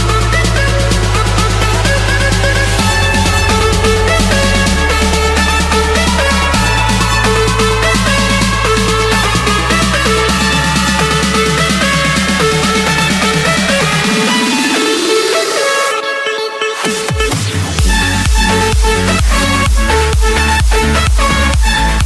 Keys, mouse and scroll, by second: 0.9 click, 2.1 click, 2.7 click, 3.1-4.0 scroll, 5.4-6.6 drag, 7.4 click, 7.6 scroll, 8.8 click, 9.7 click, 10.0-10.7 scroll, 11.8 click, 12.8 click, 13.5 click, 13.8-14.5 scroll, 15.1 click, 15.8 click, 16.8 click, 17.9 click, 19.7 click.